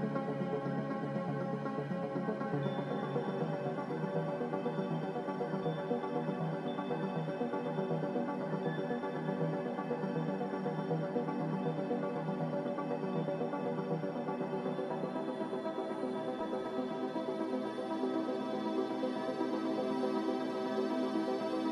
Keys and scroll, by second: 0.0 f, 4.2 m, 8.1 a, 12.5 m.